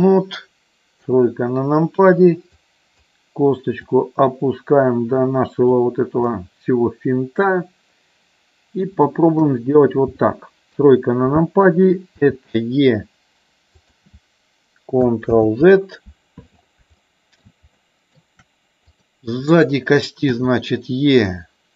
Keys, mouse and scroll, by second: 1.1 KP_3, 2.7 click, 3.8-5.8 drag, 6.3-7.5 middle drag, 9.3 KP_1, 10.7 KP_3, 12.2 e, 13.7 click, 15.2 ctrl+z, 17.0 shift+middle click, 17.8 shift+middle click, 18.9 click, 20.3 e.